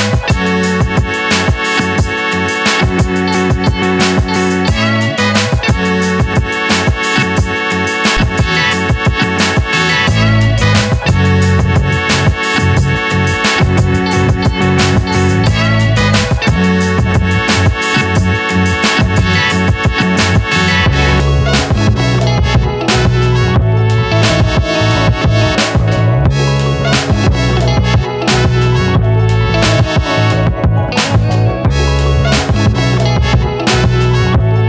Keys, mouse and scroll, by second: 1.5 x, 3.1 Return, 5.6 Return, 5.6 shift+a, 8.2 click, 10.0 n, 13.4 click, 19.3-24.3 drag, 24.6 click, 27.5 Return, 28.5 scroll down 1, 29.3-31.9 middle drag, 31.9 r.